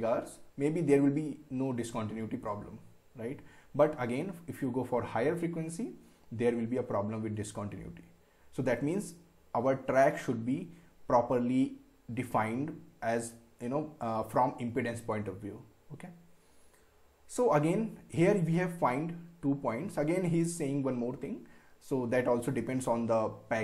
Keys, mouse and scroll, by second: 16.6 scroll down 1, 17.2 scroll down 1, 17.8-18.1 scroll down 1, 20.2 scroll down 1.